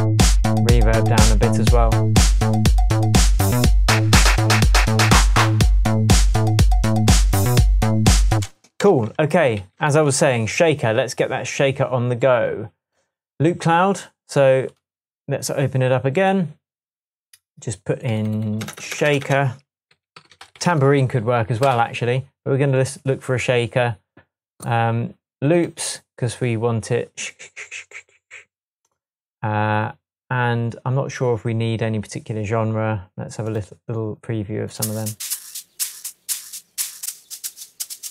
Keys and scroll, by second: 8.4 space, 8.9 Tab, 9.6 s, 10.0 Tab, 18.6 BackSpace, 19.9-21.4 typing, 21.7 Return, 36.3 Down.